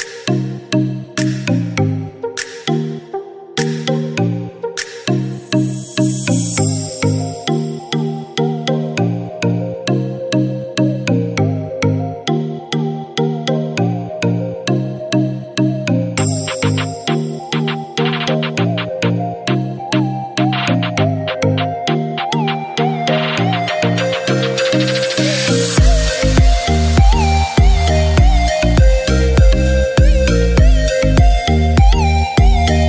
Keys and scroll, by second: 17.7 ctrl+shift+a, 20.4 ctrl+-, 20.7 ctrl+=, 25.2 ctrl+-.